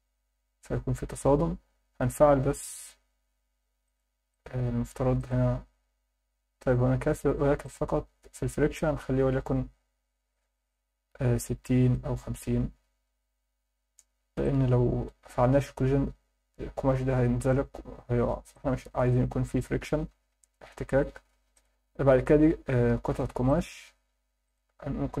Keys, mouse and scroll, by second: 1.4-2.8 scroll down 3, 3.8 click, 4.3 click, 5.2 click, 7.6 click, 8.1-8.8 scroll down 2, 8.8-11.9 drag, 14.0 scroll down 1, 14.4 alt+middle click, 18.5-19.0 alt+middle drag, 21.5 click, 23.5 click, 24.5-25.2 drag.